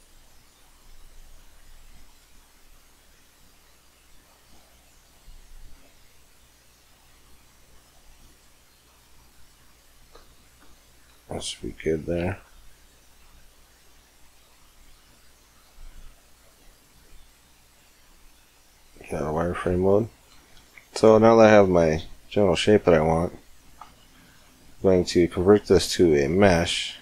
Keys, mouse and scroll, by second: 0.4-3.8 right drag, 2.2 g, 5.0-6.8 middle drag, 9.9 Tab, 10.6 middle click, 12.4-13.7 middle drag, 14.2 middle click, 14.8 Tab, 15.3 Tab, 15.6-16.5 right drag, 17.7 z, 20.8-22.3 middle drag, 22.4 middle click, 23.2-25.6 middle drag, 25.6 alt+c.